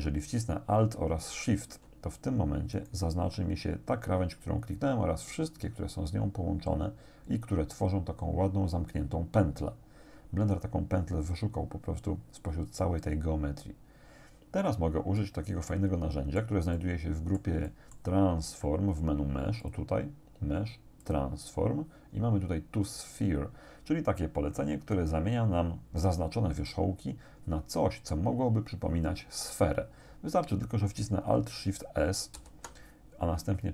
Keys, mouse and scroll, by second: 2.8 alt+shift+right click, 15.2-16.6 drag, 16.8 click, 19.6 click, 21.0 click, 32.4 alt+shift+s.